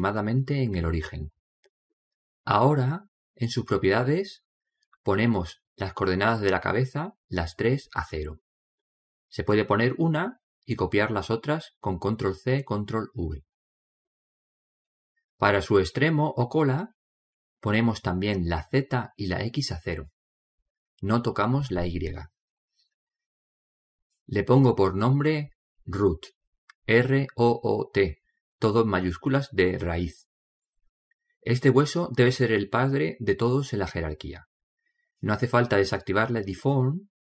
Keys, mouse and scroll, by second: 1.3 right click, 5.0 click, 8.6 ctrl+c, 10.0 ctrl+v, 11.0 ctrl+v, 19.3 ctrl+v, 20.5 ctrl+v, 24.0 middle click, 26.8-29.4 drag, 29.8 shift+o, 33.2 middle click, 33.8-36.5 middle drag.